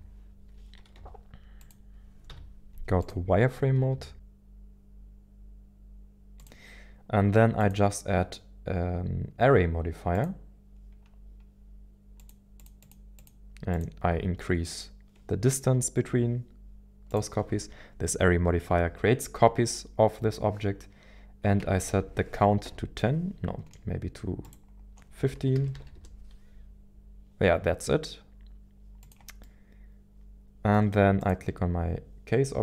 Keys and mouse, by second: 1.0 g, 1.6 click, 2.3 z, 3.9 s, 5.9 g, 6.4 click, 12.3 click, 12.9 click, 13.1 click, 17.3-23.7 drag, 23.9-27.2 drag, 25.5 BackSpace, 29.0 click, 29.4-31.2 middle drag, 31.2 click.